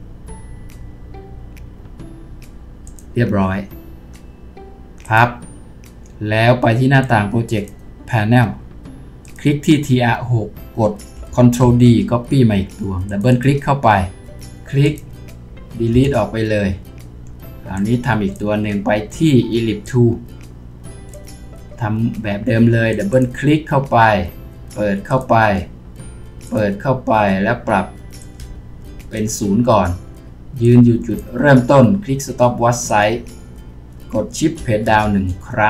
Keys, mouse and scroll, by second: 11.6 ctrl+d, 13.3 double click, 15.9 Delete, 34.9 shift+Page_Down.